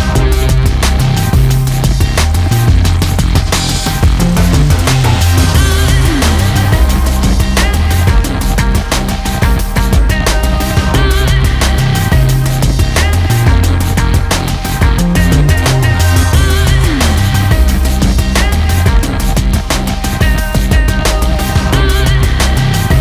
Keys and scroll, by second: 6.4 ctrl+z, 6.9 ctrl+space, 7.4 ctrl+space, 12.4 ctrl+space, 14.1 ctrl+z, 18.6 ctrl+z.